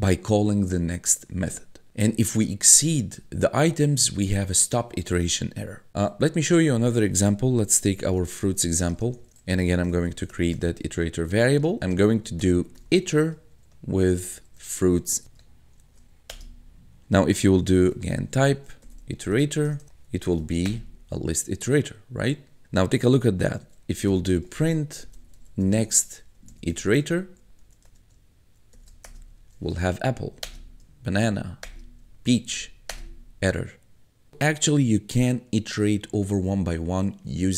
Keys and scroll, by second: 5.9 Return, 7.4-15.8 typing, 16.3 Return, 17.2-20.6 typing, 20.7 Return, 23.3-28.5 typing, 29.1 Return, 30.1 Up, 30.4 Return, 31.2 Up, 31.6 Return, 32.5 Up, 32.9 Return.